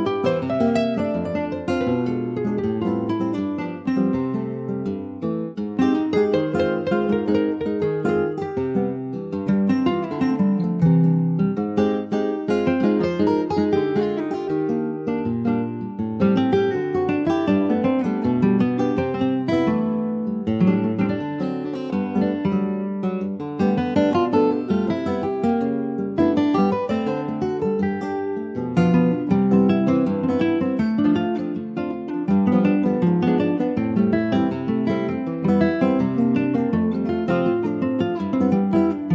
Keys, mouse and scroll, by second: 4.2 click, 4.7 middle click, 4.9-5.3 scroll up 1, 5.3-6.4 shift+middle drag, 6.4 shift+d, 7.3 middle click, 7.9 e, 10.3 2, 10.7 click, 11.4 shift+click, 11.9 middle click, 12.4 ctrl+b, 21.1 click, 22.9-26.0 drag, 29.4-32.5 drag, 35.8 Tab, 36.0 click, 36.2 scroll down 2, 36.5 middle click, 37.0 ctrl+s, 37.1 scroll down 1, 37.3 middle click, 37.5 scroll up 1, 37.7 click, 37.9 Tab, 38.2 scroll up 1, 38.4 shift+middle click, 39.0-39.1 scroll up 1.